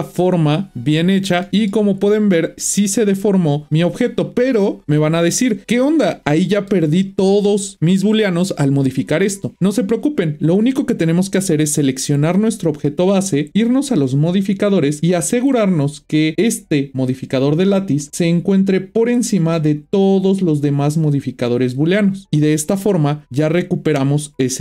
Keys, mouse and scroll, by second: 0.2 Tab, 1.4 middle click, 2.0 scroll down 5, 2.9-5.5 middle drag, 6.2-7.7 middle drag, 11.0 click, 14.5 click, 15.4-16.3 scroll down 4, 16.3-18.6 drag, 18.7-21.7 drag, 22.9-24.6 middle drag.